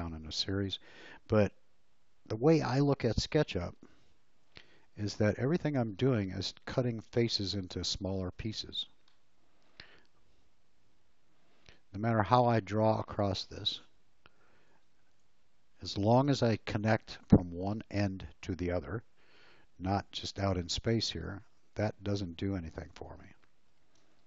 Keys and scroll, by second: 4.2 ctrl+z, 8.1 space, 11.3 l, 14.7 alt+space, 16.2 Escape, 16.7 space, 19.8 l, 22.7 space.